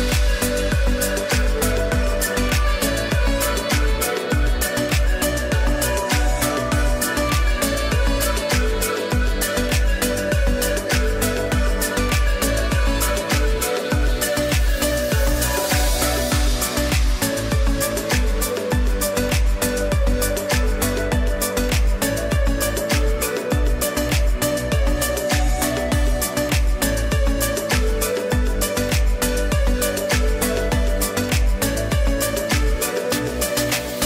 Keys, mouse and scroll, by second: 2.3 z, 2.6 click, 3.4 space, 3.6 click, 4.4 space, 4.6 click, 10.4 click, 11.2 click, 11.3 click, 14.2 click, 14.9 space, 15.0 click, 16.2 ctrl+j, 18.0 click, 26.2 alt+click, 29.3 alt+click, 30.5 b, 32.0 click, 33.0 typing.